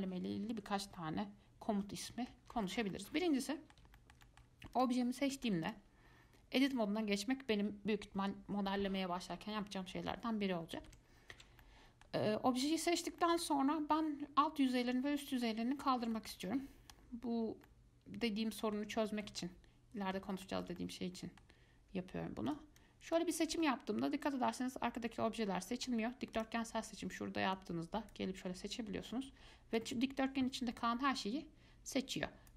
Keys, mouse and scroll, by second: 5.0 click, 5.3 scroll up 1, 5.5 shift+middle click, 5.9 click, 10.8 scroll down 2, 11.1 Tab, 11.8-13.1 middle drag, 13.1 scroll up 1, 13.4-16.0 middle drag, 16.0-16.3 scroll up 2, 16.3-17.6 shift+middle drag, 17.6 scroll down 1, 17.9-22.7 middle drag, 22.7 click, 23.0 click, 23.8-26.2 middle drag, 26.2 scroll down 2, 26.6 click, 27.8 click, 28.6-29.3 scroll up 1, 30.0 click.